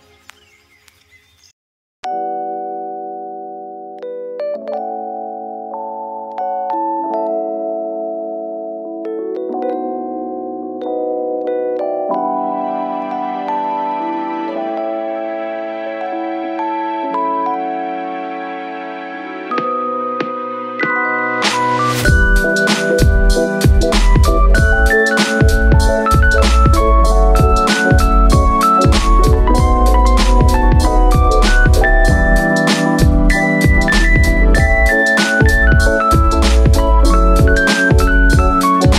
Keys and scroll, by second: 18.9 super+z, 36.4 x.